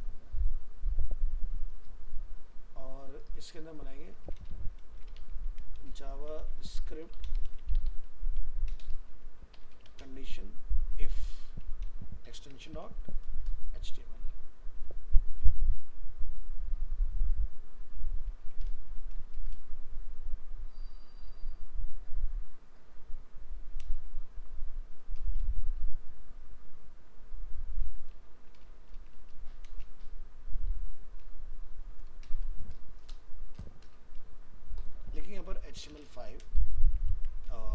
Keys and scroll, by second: 37.1 ctrl+s.